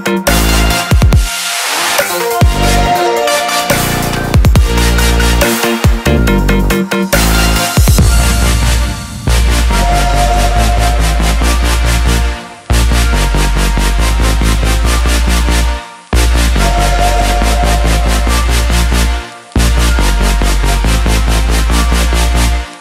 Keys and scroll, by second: 16.6 ctrl+t.